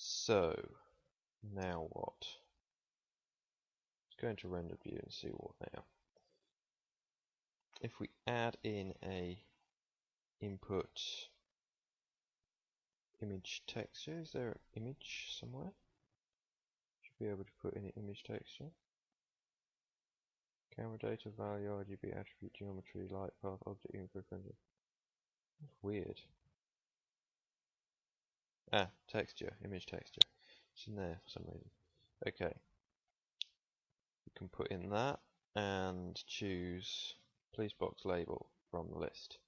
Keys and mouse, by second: 0.2 z, 0.8 z, 1.9 Tab, 3.0 Tab, 6.0-11.7 middle drag, 29.8 click.